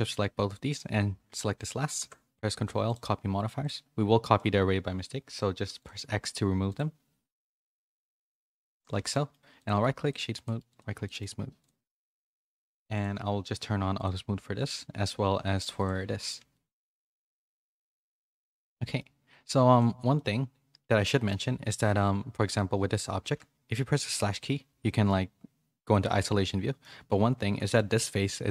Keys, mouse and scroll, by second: 0.0 shift+click, 1.9 ctrl+l, 3.6-5.0 drag, 6.6 click, 8.9 a, 9.1 middle click, 9.7 right click, 10.4 click, 11.0 middle click, 11.6 click, 13.9 click, 15.7 click, 16.3 a, 16.5 middle click, 17.5 a, 17.7 a, 17.8 middle click, 18.1 shift+middle click, 18.7 middle click, 19.7 click, 20.1-21.2 middle drag, 24.0 /, 24.8 middle click, 25.9 middle click, 27.1 Tab, 27.4 3, 27.6 click, 27.9-28.5 middle drag.